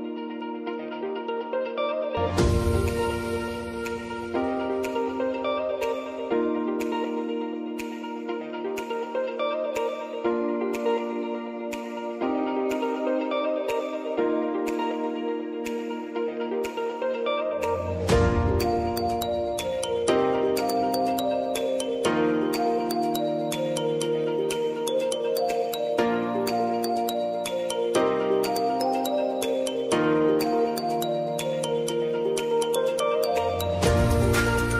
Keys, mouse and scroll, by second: 2.0-3.8 typing, 5.1 3, 6.2-8.7 typing, 7.8 click, 10.4 click, 12.3 [, 12.7 space, 15.0 space, 15.9 click, 17.1 space, 20.0 space, 20.8-22.3 drag, 22.3 space, 24.3 click, 24.9 space, 28.8 click, 30.0 s, 31.6 -, 33.2 click, 33.4 u.